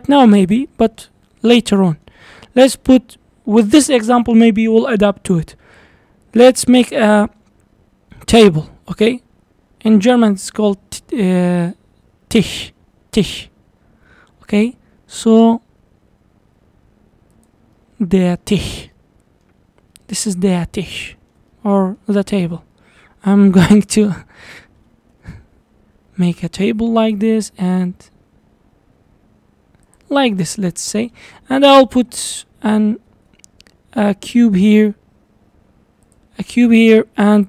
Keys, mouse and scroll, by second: 0.7-1.2 middle drag, 1.2-1.6 scroll up 4, 1.6-5.5 shift+middle drag, 8.7 s, 17.8-18.6 middle drag, 18.6-19.0 scroll up 4, 19.0-19.7 middle drag, 19.7-20.0 scroll down 3, 20.0-22.9 middle drag, 22.9 scroll up 1, 23.8 s, 27.4 s, 30.2-32.3 middle drag, 32.3 shift+right click, 33.1 shift+a, 36.5 scroll down 1, 36.7-37.4 middle drag.